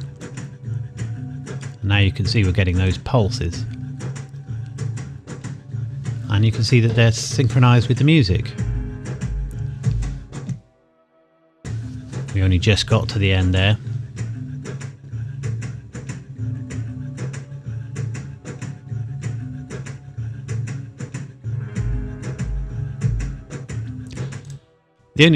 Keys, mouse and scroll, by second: 2.9 click, 24.5 click.